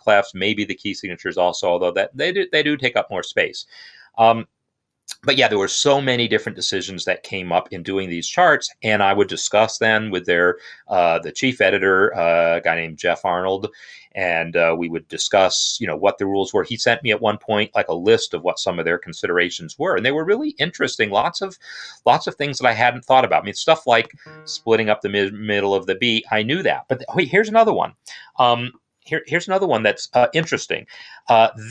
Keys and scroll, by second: 30.7 n.